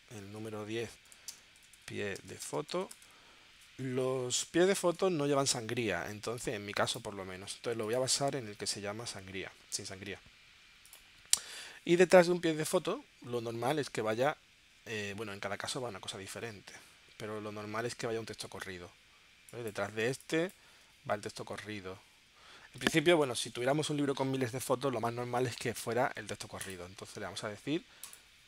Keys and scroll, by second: 0.9-3.5 typing, 12.2 super+Tab, 20.1 space, 23.2 super+Tab.